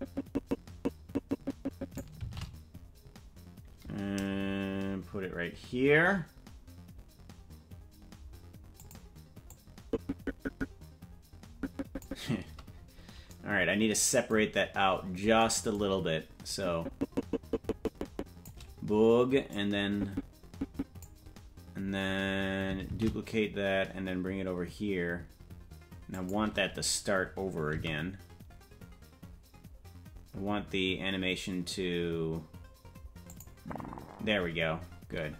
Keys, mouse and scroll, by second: 2.5 shift+d, 9.9-12.4 drag, 13.3 scroll up 5, 14.8-16.7 scroll up 4, 16.7-18.7 drag, 20.0-21.3 drag, 23.1 shift+d, 28.2 s, 35.1-35.3 scroll up 11.